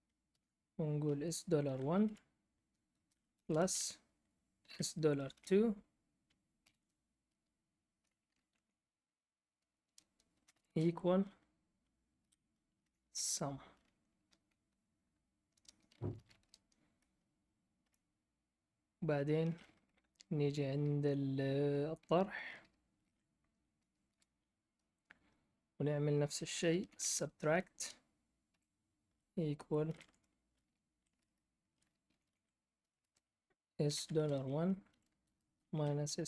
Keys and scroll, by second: 0.0-5.3 typing, 6.5 ", 8.5 Left, 10.2-14.0 typing, 15.6 Return, 15.7-16.5 typing, 17.8 BackSpace, 22.0-22.9 typing, 24.0 Return, 26.5-36.2 typing.